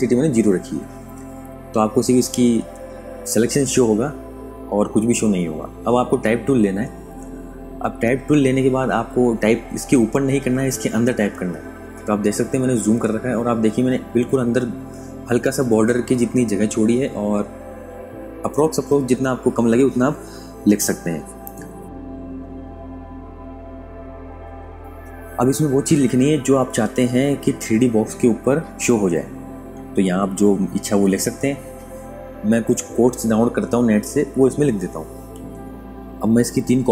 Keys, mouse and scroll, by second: 4.0 super+Num_Lock, 4.2 KP_Add, 8.5 super+KP_Subtract, 10.2 click, 11.4 space, 12.0 click, 22.5 click, 23.0 typing, 28.9-31.8 typing, 33.4-34.4 typing, 35.3 ctrl+a, 36.0 alt+click, 36.7 ctrl+alt+click.